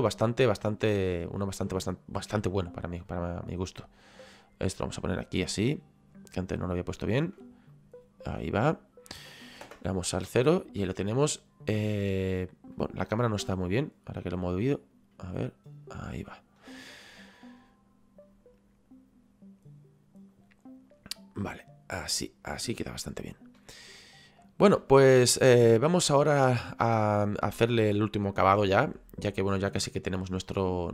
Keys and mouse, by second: 0.8 middle click, 3.5 click, 6.6 shift+right click, 7.7 click, 9.6 KP_0, 14.2 click, 15.4 middle click, 17.3 middle click, 21.4 middle click, 23.8 shift+middle click, 25.8 right click.